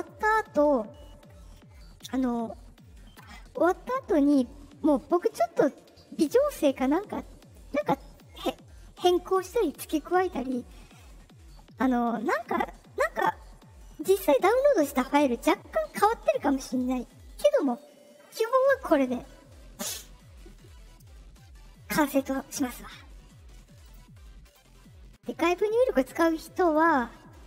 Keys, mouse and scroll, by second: 0.0 click, 23.8 click, 24.4 click, 25.4 click, 26.6 click.